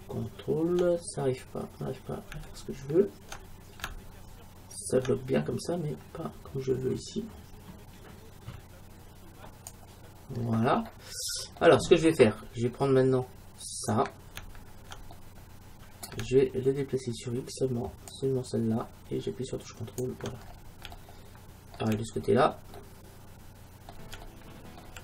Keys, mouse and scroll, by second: 10.5 middle click, 11.2 middle click, 11.4 middle click, 11.7-14.1 middle drag, 13.8-15.6 right drag, 15.2-17.2 middle drag, 18.2-20.0 drag, 20.5-23.0 middle drag, 23.0 middle click, 23.2 middle click, 23.6-25.0 middle drag.